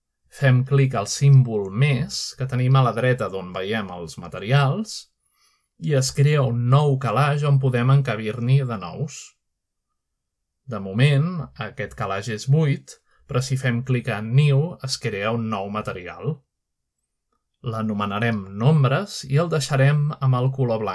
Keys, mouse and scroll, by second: 2.8 click, 6.5 click, 10.8 click, 13.2 click, 15.5 click, 16.0-17.4 drag, 19.5-20.5 typing, 20.7 Return.